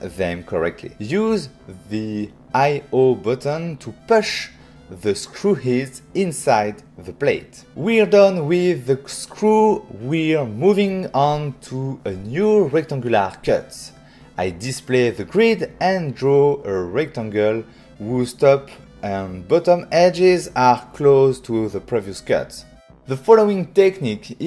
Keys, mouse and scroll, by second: 0.3 click, 0.6 click, 3.3 click, 4.4 middle click, 7.3 click, 8.1 click, 8.7 right click, 9.5 click, 10.2 middle click, 10.9 ctrl+middle click, 11.5 middle click, 11.8 middle click, 12.6 f, 13.7 click, 14.7 right click, 16.5 click, 16.8 shift+click, 22.0 shift+click.